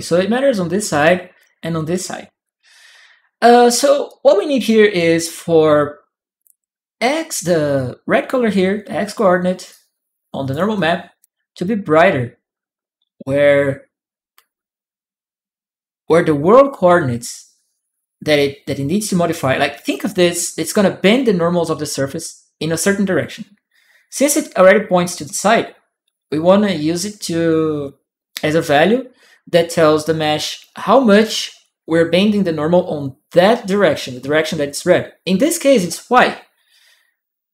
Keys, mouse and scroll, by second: 2.2-3.6 drag, 3.8-4.9 right drag, 9.5 click, 9.5 right click, 10.5 click.